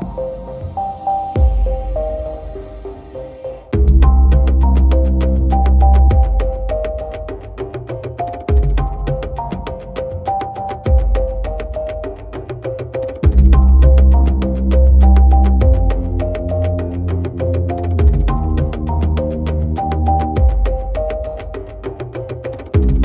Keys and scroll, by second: 2.7 ctrl+j, 8.4 ctrl+u, 17.5 ctrl+=.